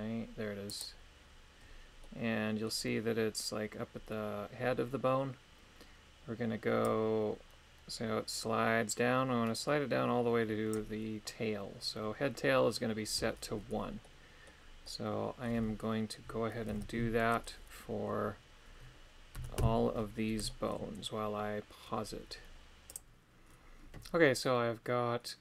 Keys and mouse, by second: 2.1 middle click, 6.9-10.8 drag, 14.0 middle click, 14.8 middle click, 16.7 alt+h, 17.1 middle click, 19.3 a, 19.6 a, 20.5 shift+middle click, 24.4-25.4 middle drag.